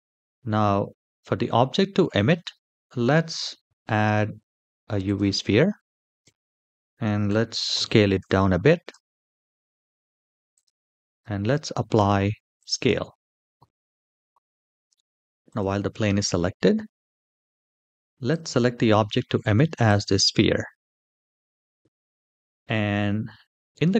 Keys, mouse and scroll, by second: 2.1 shift+middle click, 2.6 middle click, 3.4 shift+a, 6.0 s, 8.6 g, 11.2 ctrl+a, 15.2 click, 16.2-17.6 scroll down 5, 17.6-18.0 scroll down 1, 18.0 click.